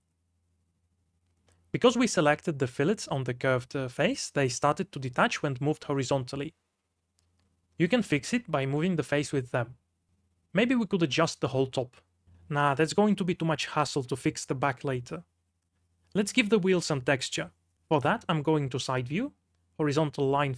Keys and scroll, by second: 0.7 3, 1.5 g, 2.5 Escape, 3.0 3, 4.5 g, 6.2 Escape, 7.7 g, 9.1 Escape, 9.7 g, 12.9 r, 13.2 Escape, 14.9 r, 16.1 ctrl+z, 19.2-20.5 typing.